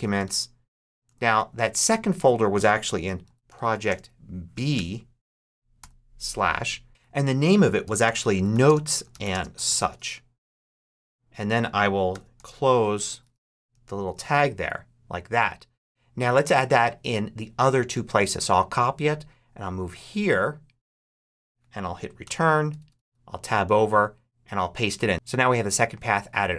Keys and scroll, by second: 0.0-0.9 typing, 2.5-4.6 typing, 5.7 shift+/, 7.5-10.3 typing, 11.7-14.3 typing, 17.8 super+c, 22.1 Return, 22.6 Tab, 23.4 super+Tab, 23.5 super+v.